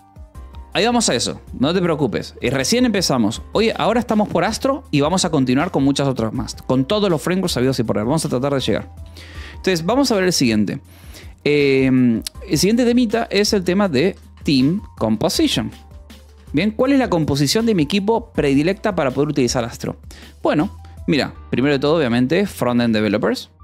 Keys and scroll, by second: 2.0 k, 2.6 j, 8.9 Return, 13.4-17.5 typing, 18.6 space, 21.4-23.6 typing.